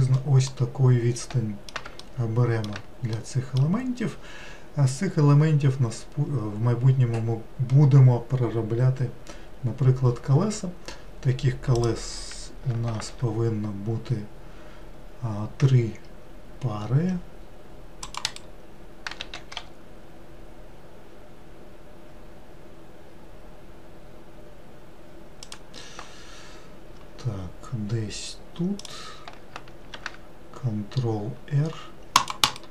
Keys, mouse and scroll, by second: 0.5-6.3 middle drag, 11.7 click, 12.9 ctrl+r, 19.2 s, 28.8 click, 29.9 ctrl+r.